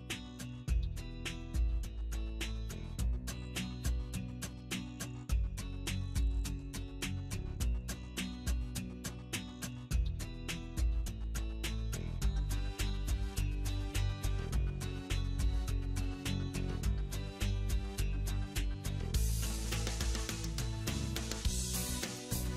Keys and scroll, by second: 2.7 alt+w, 5.5 ctrl+z, 9.4 alt+w.